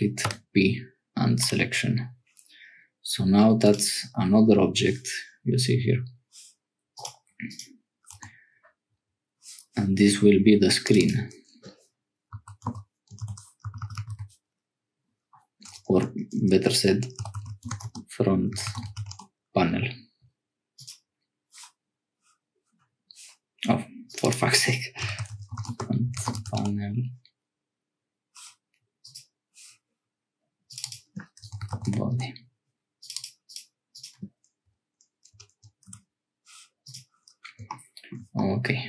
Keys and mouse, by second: 0.2 p, 3.6 click, 7.4 click, 8.2 Tab, 10.8 click, 10.9-19.9 drag, 13.9 e, 15.7 BackSpace, 15.9 BackSpace, 16.2 BackSpace, 16.3 BackSpace, 20.7 click, 24.2-27.3 drag, 29.0 click, 30.8-32.7 drag, 33.1-36.4 drag, 35.3 BackSpace, 38.4 click.